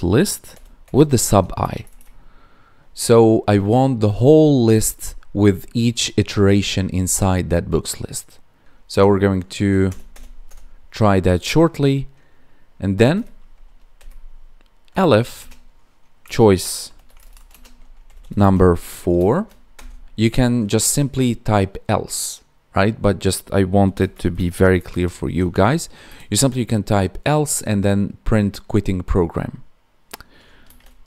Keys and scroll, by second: 1.2 ctrl+s, 1.5 Escape, 1.8 Right, 15.3 space, 17.4 space, 18.3 space, 26.0 Escape.